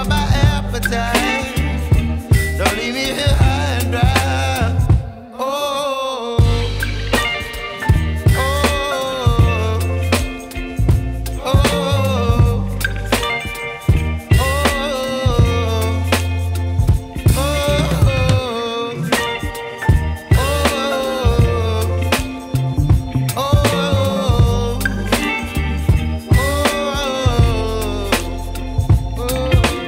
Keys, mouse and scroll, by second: 0.1 shift+r, 0.5 shift+r, 0.9 shift+r, 1.2 shift+r, 1.9-4.1 scroll down 7, 4.1-6.9 typing, 7.5 scroll down 3, 9.1-11.3 typing, 13.0 shift+r, 13.2-13.7 shift+r, 14.8 KP_0, 15.7-16.1 scroll up 5, 17.2 ctrl+s, 18.0 space, 20.8 click, 21.9 click, 27.9 space, 28.9-29.3 drag, 29.3 scroll down 4.